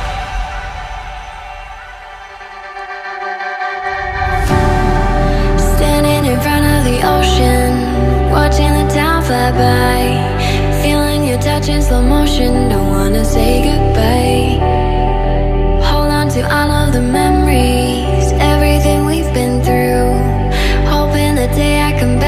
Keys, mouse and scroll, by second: 0.2 double click, 0.7 ctrl+click, 10.0 ctrl+click, 10.6 double click, 12.5 double click, 12.8 ctrl+click, 14.4 double click, 20.0 double click, 20.3 right click, 21.8 right click.